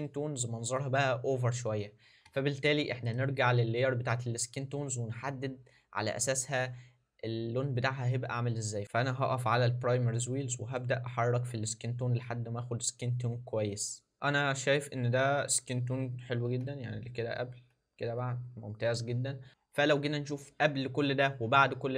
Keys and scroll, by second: 16.6 ctrl+d.